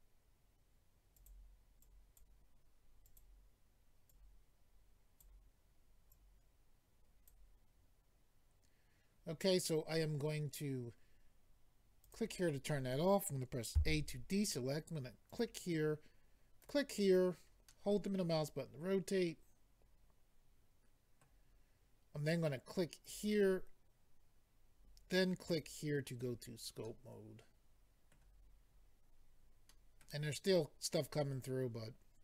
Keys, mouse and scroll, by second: 1.2 click, 1.3 click, 1.8 click, 3.0 click, 3.2 click, 4.1 click, 6.1 click, 12.0 click, 12.1 click, 13.7 a, 15.3 click, 16.6 click, 17.6 middle click, 23.0 click, 23.1 click, 25.5 click, 25.6 click, 26.3-26.8 scroll down 1, 26.8 middle click, 26.8-27.4 scroll down 2, 30.0 middle click.